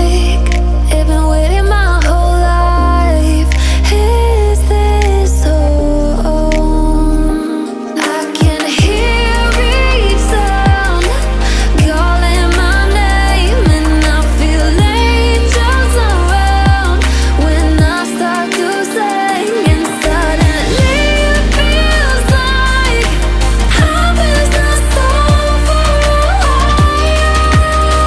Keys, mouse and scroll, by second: 1.1 click, 1.5-1.9 alt+scroll down 1, 2.1 click, 2.6 alt+scroll up 1, 3.1-9.3 drag, 11.5-12.3 alt+scroll down 1, 12.3-12.6 alt+scroll up 1, 12.7 click, 18.0 alt+scroll up 1, 18.3-19.0 alt+scroll down 1, 19.0-20.3 alt+scroll up 1, 20.5 alt+scroll down 1, 21.6 alt+scroll up 1, 23.9 alt+scroll down 1, 24.6-25.0 alt+scroll up 1, 27.4 F7.